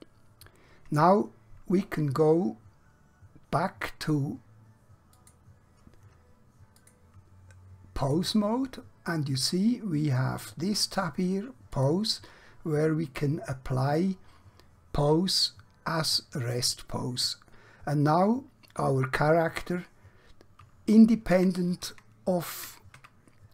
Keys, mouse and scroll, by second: 5.0 click, 16.3 click, 21.3 Caps_Lock, 23.0 Tab.